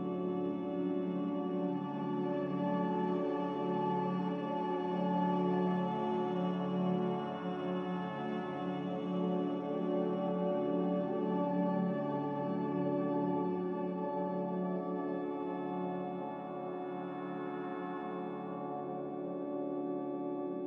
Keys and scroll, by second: 12.6 ctrl+w, 18.2 q, 20.4 F9.